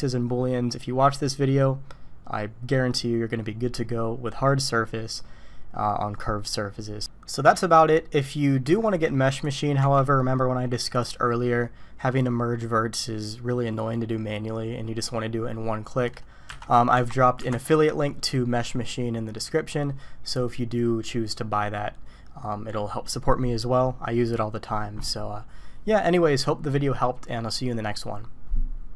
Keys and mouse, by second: 7.6-8.5 middle drag, 9.8 Tab, 10.9 click, 16.6 alt+a, 16.9 Tab, 17.5 alt+a.